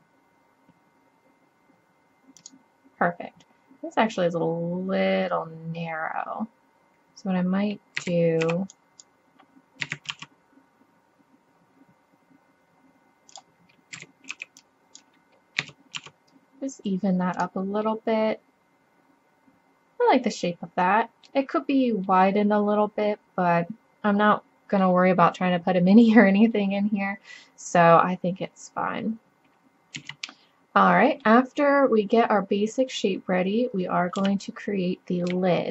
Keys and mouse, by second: 8.0 a, 8.4 b, 9.8 s, 14.0 a, 14.3 b, 15.6 s, 19.8 middle click, 20.4 middle click, 22.1 click, 30.0 z, 34.2 KP_3.